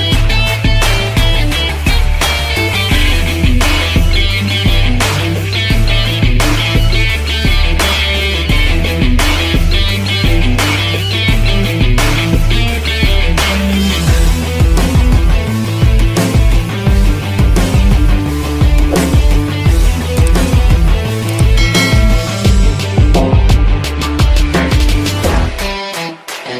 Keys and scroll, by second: 3.4 m, 4.9 v, 10.4 i, 11.2 v, 11.9 i, 12.8 v, 20.7 Delete, 24.8 ctrl+0.